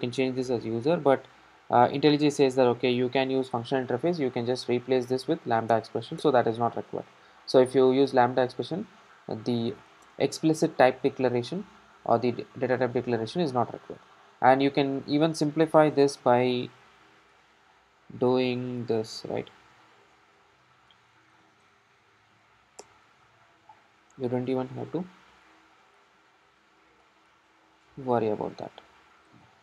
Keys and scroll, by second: 5.8 alt+Return, 19.6 ctrl+alt+shift+Left, 22.8 Return, 24.3 super+d, 26.6 super+x, 27.8 super+z, 29.3 super+x.